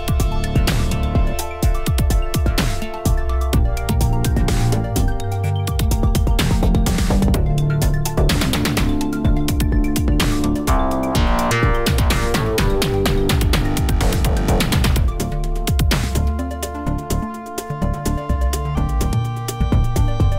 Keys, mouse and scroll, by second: 2.6-3.6 scroll up 2, 3.6 click, 3.7 g, 4.6 shift+middle click, 5.0 click, 5.1 g, 5.6 click, 6.6 Tab, 6.9 shift+middle drag, 7.1 scroll up 1, 7.2 a, 7.4 g, 8.9 Tab, 8.9 click, 9.1 Tab, 9.4 a, 9.5 g, 11.2 Tab, 11.3 click, 11.5 Tab, 11.8 a, 12.0 g, 14.4 Tab, 14.5 click, 14.7 Tab, 15.0 a, 15.9 shift+middle click, 16.1-16.8 scroll up 4, 16.3 1, 16.8 shift+middle click, 17.2 click, 18.1 i, 18.5 click.